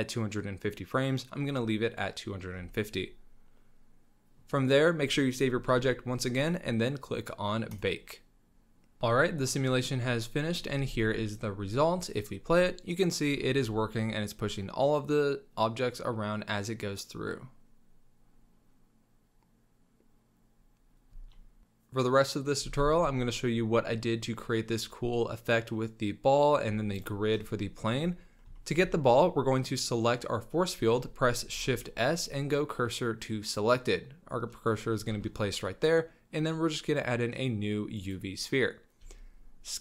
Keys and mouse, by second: 2.7 drag, 2.9-4.4 middle drag, 5.7 ctrl+s, 7.7-8.9 drag, 10.1 click, 10.7 space, 12.9 click, 13.4 shift+drag, 13.8 s, 21.1 space, 21.3 drag, 23.2 middle click, 23.2-23.7 drag, 23.7-24.1 middle drag, 24.1 click, 24.2 middle click, 26.9 click, 27.3 middle click, 28.5 shift+drag, 31.5 shift+s, 35.1 shift+a, 39.0 s.